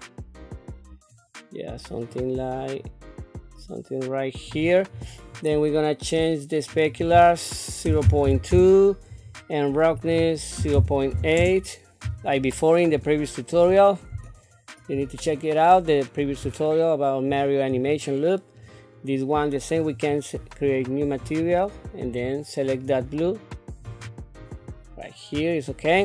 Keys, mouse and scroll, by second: 6.7-8.5 drag, 9.9-11.4 drag, 13.1 shift+middle click, 13.8 scroll down 1, 14.3 shift+middle click, 15.2 scroll up 2, 16.1 scroll down 1, 16.7 shift+middle click, 17.7 click, 19.7 click, 21.2 click, 22.0 click, 22.7-24.0 drag, 25.4 shift+middle click.